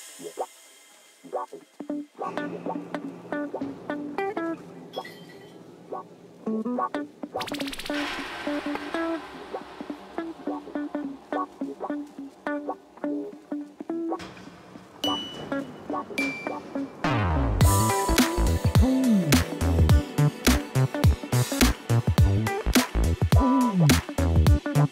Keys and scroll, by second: 0.6 shift+z, 1.0 g, 1.3 shift+z, 1.6 Tab, 3.2 Tab, 4.1 g, 4.9 g, 5.4 g, 7.1 g, 8.0 g, 8.2 g, 9.6 g, 11.3 Tab, 22.1 Tab, 23.3 3, 23.8 Tab.